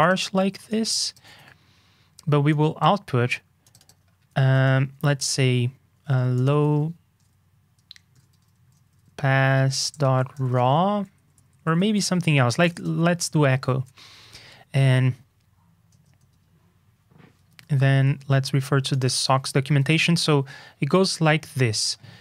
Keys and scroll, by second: 0.4 super+c, 1.2 super+v, 10.0 ctrl+k, 12.0 alt+shift+Left, 13.5 ctrl+e, 16.2 super+Tab, 19.6 super+Up.